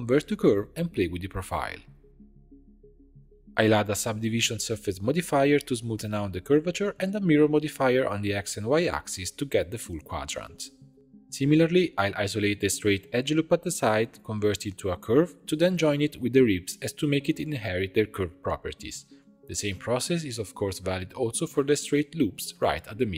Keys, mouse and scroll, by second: 0.0 click, 0.4 click, 1.7-3.1 shift+drag, 3.8-6.5 drag, 7.0-10.1 drag, 10.8 click, 11.2 Tab, 11.7 2, 12.1 click, 12.7 ctrl+click, 13.2 shift+d, 13.8 p, 14.2 Tab, 14.3 drag, 15.6-16.1 drag, 16.2 shift+click, 16.9 ctrl+j, 17.8 click, 19.3 click, 19.7 click, 19.9 Tab, 20.1 2, 20.3 click, 20.9 ctrl+click, 22.1 shift+d, 22.8 p.